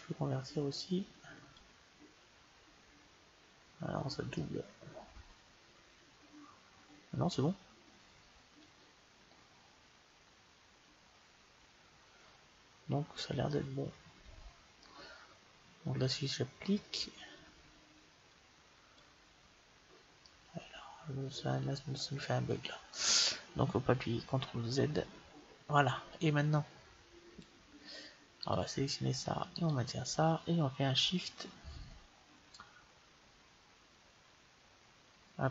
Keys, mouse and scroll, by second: 0.7-2.4 drag, 4.2-6.1 middle drag, 13.3-15.0 middle drag, 18.2-19.9 drag, 20.1-22.0 middle drag, 24.9 ctrl+z, 28.3-31.2 right drag.